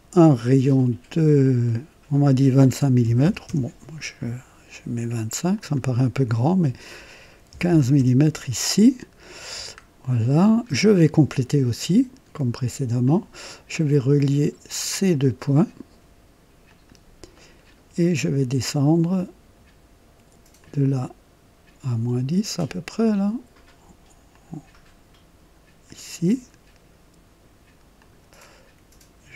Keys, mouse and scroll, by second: 1.3 click, 2.9 KP_2, 3.1 KP_5, 3.5 KP_Enter, 5.5 click, 7.5 KP_1, 7.6 KP_5, 7.9 Return, 9.6-10.0 scroll up 1, 10.7 scroll down 1, 13.0 click, 14.7 click, 16.6 click, 17.3 right click, 17.8 typing, 20.5 click, 24.2 click, 25.8 click, 27.9 click.